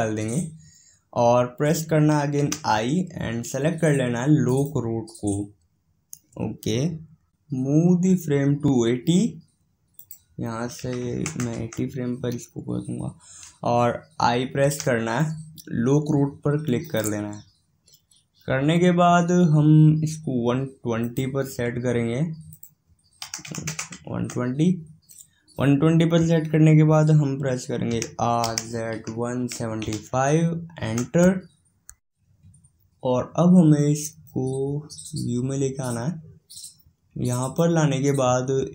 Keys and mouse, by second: 10.0-17.0 drag, 21.0-24.4 drag, 34.7-36.6 drag.